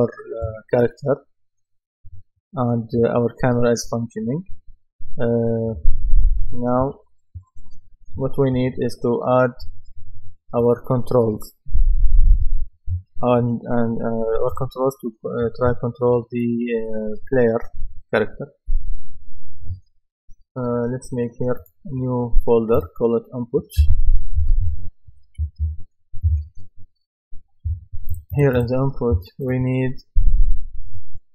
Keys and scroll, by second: 6.8 Escape, 24.1-26.1 typing, 26.3 Return.